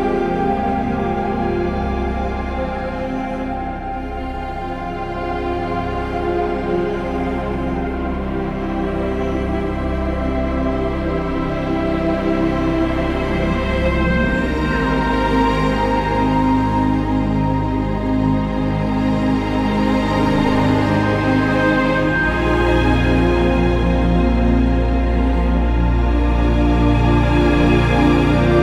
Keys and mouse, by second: 0.6 x, 2.1 Tab, 2.4 click, 2.6 Tab, 5.1 g, 5.3 y, 8.6 click, 11.8 ctrl+KP_3, 14.0 z, 15.7 Tab, 20.1 ctrl+j, 23.7 KP_3.